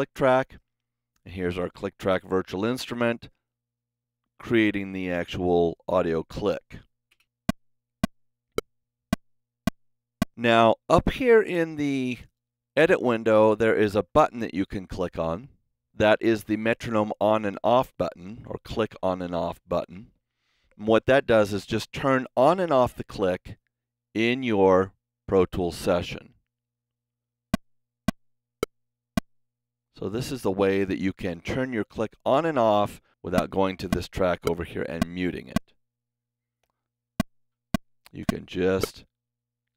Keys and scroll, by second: 7.0 space, 10.3 space, 12.3 space, 22.3 super+=, 24.1 space.